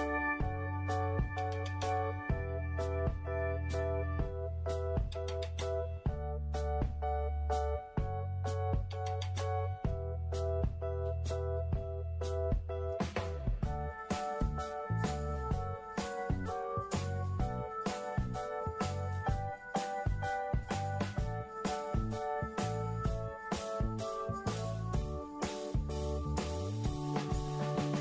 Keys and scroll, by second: 5.3 ctrl+d.